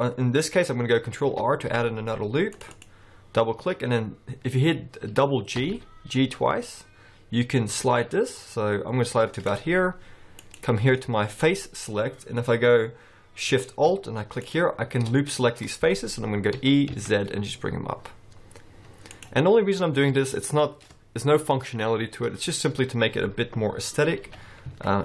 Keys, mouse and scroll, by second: 1.2 ctrl+r, 5.6 g, 10.4 click, 14.4 alt+shift+click, 16.6 e, 19.5 scroll down 3, 19.8 middle click, 23.8-24.3 scroll up 2, 24.3 g.